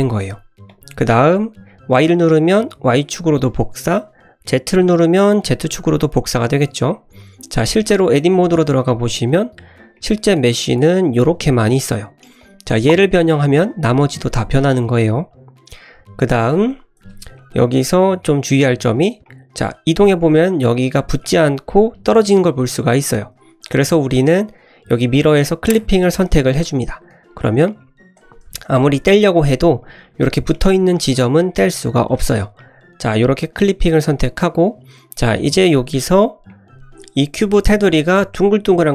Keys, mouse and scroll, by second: 0.0 click, 0.6 click, 0.6 s, 1.9 click, 2.4-4.4 middle drag, 4.4 click, 4.9-5.2 middle drag, 5.8-6.9 middle drag, 7.2 scroll up 1, 7.5-8.1 scroll down 1, 8.1 Tab, 8.9 middle click, 9.4 1, 9.9 middle click, 10.3-10.8 drag, 10.9 scroll up 2, 11.2-12.1 middle drag, 12.3 drag, 12.8 g, 14.3 ctrl+z, 15.4-15.7 scroll down 1, 15.7 scroll up 1, 16.5 Tab, 17.0 Tab, 17.3 middle click, 18.9 click, 19.5 g, 22.9 ctrl+z, 23.6 click, 25.6 click, 26.6-26.9 drag, 27.1 g, 28.4 ctrl+z, 28.7 click, 29.1 g, 30.0 ctrl+z, 30.2 click, 30.7 middle click, 30.9 scroll down 1, 31.1 g, 31.9 ctrl+z, 32.3 scroll down 1, 32.6 middle drag, 33.0 scroll up 1, 33.2 middle click, 34.3 middle click, 35.0-35.5 scroll up 1, 36.2 scroll up 1, 36.4 middle click, 36.7-37.2 scroll up 3, 37.2 middle click.